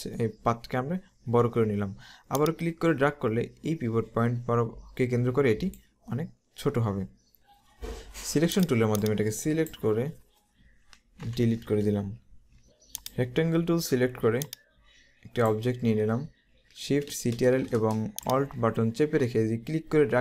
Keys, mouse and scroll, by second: 2.4 click, 8.7 click, 11.3 Delete, 13.0 click, 14.4 click, 18.2 click.